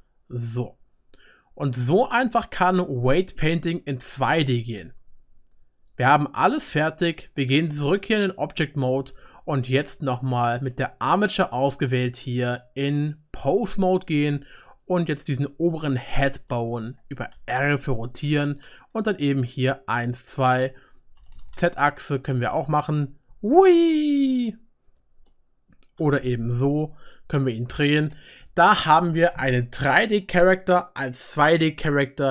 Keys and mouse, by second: 1.1 click, 1.1 right click, 2.1 click, 2.1 middle click, 2.1 right click, 2.8-8.3 drag, 2.8-8.3 middle drag, 2.8-8.3 right drag, 8.3-9.2 typing, 11.1-12.7 drag, 16.1 shift+middle click, 16.4-17.5 shift+middle drag, 17.3 r, 22.7-24.2 drag, 22.7-24.2 middle drag, 22.7-24.2 right drag, 25.5-32.3 middle drag, 26.0 r, 32.1-32.3 drag, 32.1-32.3 right drag.